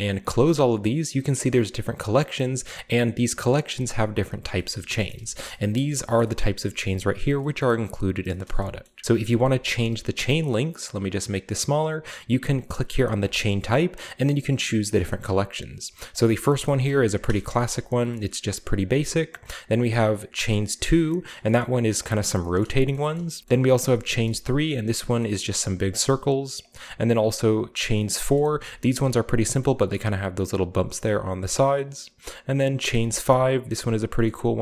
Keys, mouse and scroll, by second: 1.1 middle click, 1.8-2.6 middle drag, 2.8 click, 3.4 drag, 4.5-5.3 shift+scroll down 2, 4.7 shift+middle drag, 5.1 shift+middle drag, 5.4 shift+middle click, 5.7 shift+middle drag, 6.2 shift+middle click, 6.4-7.1 shift+scroll up 1, 6.5 middle click, 7.2-9.1 scroll down 3, 7.6 middle click, 8.5 shift+middle click, 8.8 shift+middle drag, 9.1-11.1 shift+middle drag, 9.1-9.9 scroll up 2, 10.2-11.1 scroll down 1, 11.1 click, 11.8-12.3 middle drag, 11.8-12.7 scroll down 1, 13.2 click, 14.9 scroll down 1, 15.1-16.1 scroll up 1, 16.1 click, 16.2-18.1 shift+middle drag, 16.6 shift+drag, 16.6-18.5 shift+scroll up 2, 17.1 a, 18.3 shift+middle click, 19.3 click, 20.5 click, 21.0-21.4 middle drag, 21.4-23.1 scroll down 3, 21.6-24.9 shift+middle drag, 23.1 shift+scroll up 2, 24.2-25.1 scroll up 2, 26.6 click, 27.5-27.9 drag, 27.9-28.5 shift+middle drag, 28.5-30.2 shift+scroll up 2, 29.1-30.2 shift+middle drag, 31.8-33.0 drag, 33.0-34.0 shift+middle drag, 33.1-34.2 scroll down 3, 34.4-34.6 middle drag, 34.4-34.6 scroll up 2.